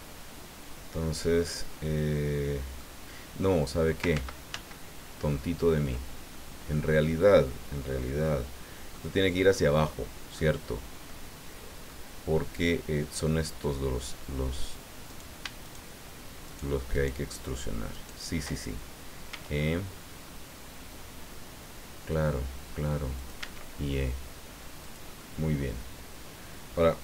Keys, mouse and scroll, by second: 3.4 middle click, 4.1 ctrl+z, 6.3 ctrl+click, 8.9-10.5 drag, 11.1 click, 13.3 click, 15.1 right click, 15.6 shift+right click, 16.5 shift+right click, 16.9 shift+right click, 17.9 shift+right click, 19.3 e, 23.2 click, 23.4 e, 24.8 click, 25.1-26.9 middle drag.